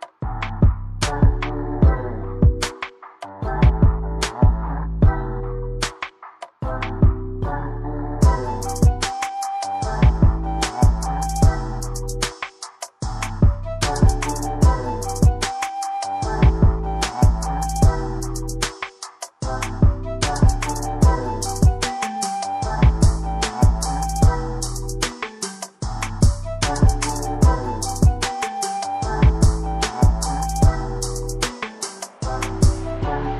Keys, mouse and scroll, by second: 3.3 click, 7.5 right click, 8.5 click, 11.9 click, 16.8 scroll down 1, 17.1 click, 20.0 double click, 20.9 click, 22.6 ctrl+c, 24.3 ctrl+v, 24.6 click, 30.8 double click, 31.9 click.